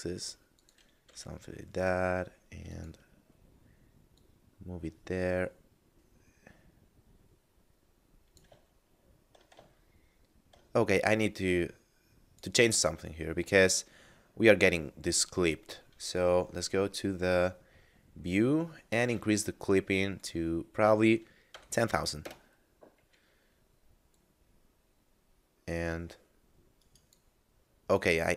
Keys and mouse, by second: 0.3 click, 1.1 g, 1.2 z, 2.7 click, 8.7 shift+middle click, 9.7 shift+middle click, 11.1 click, 15.4 middle click, 18.9 click, 21.5 0, 22.1 Return, 24.1 click, 26.7 right click, 27.9 right click.